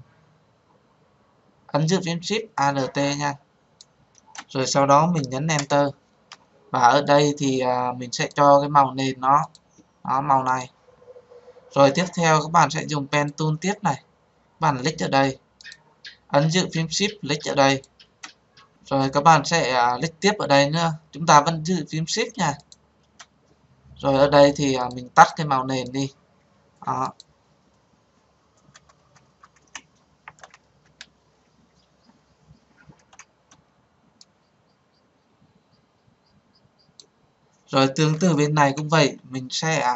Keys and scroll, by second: 5.5 Return.